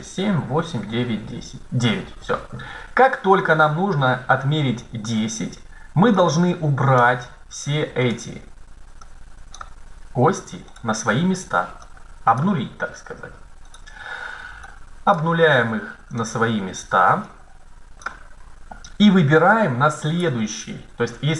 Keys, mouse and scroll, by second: 6.1-7.8 drag, 7.8-8.8 right drag, 9.8 click, 10.8-11.9 right drag, 12.3-13.7 drag, 13.7 right click, 15.4 click, 16.3 right click, 17.7-19.0 drag, 19.8-21.3 right drag.